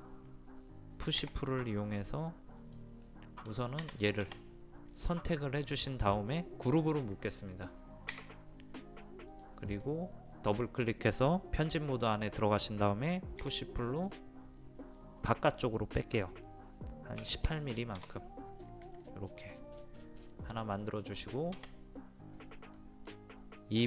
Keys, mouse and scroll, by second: 1.2 p, 2.6 click, 3.8 Escape, 4.9 click, 8.1 a, 9.3-13.4 drag, 13.4 p, 13.9 click, 17.2 KP_1, 17.5 KP_8, 19.0-21.4 middle drag, 22.4-22.8 scroll up 1, 22.8-23.8 middle drag.